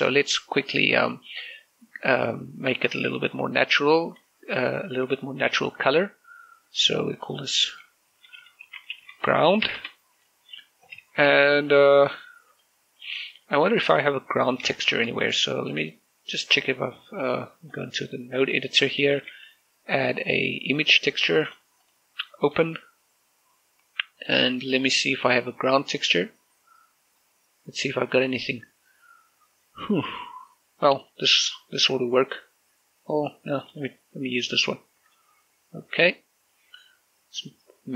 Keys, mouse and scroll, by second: 3.8 z, 6.3 click, 9.4-10.4 typing, 10.6 Return, 12.6 click, 15.6 shift+middle click, 18.5 click, 19.6 scroll down 1, 20.0 shift+a, 21.2 click, 31.1 click, 33.8 click, 37.6-37.9 drag.